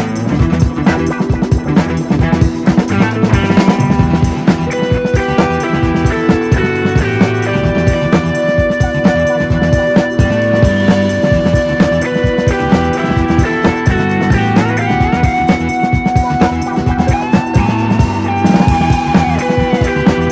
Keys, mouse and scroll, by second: 4.9 click, 12.0 scroll up 3, 12.3-13.7 drag, 14.5-20.3 drag.